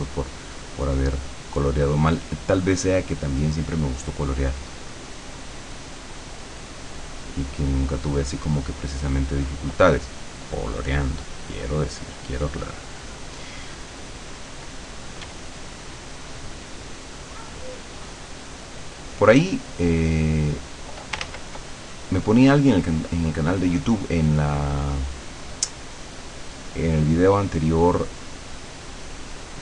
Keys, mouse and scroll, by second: 0.6-9.8 drag, 10.0-11.7 drag, 12.2-14.7 drag, 15.3 d, 15.5-19.7 drag, 20.3 click, 21.3 ctrl+z, 22.0-29.6 ctrl+drag.